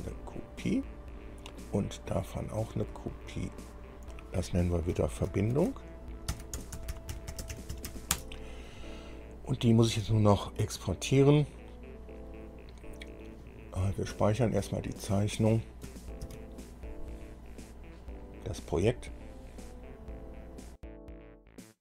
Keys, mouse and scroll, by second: 0.2 click, 0.9-1.3 scroll down 1, 1.9 click, 3.1 click, 3.7-4.0 scroll down 2, 4.3 click, 5.1 F2, 6.5-8.1 typing, 8.3 Return, 9.8 click, 16.4 ctrl+s.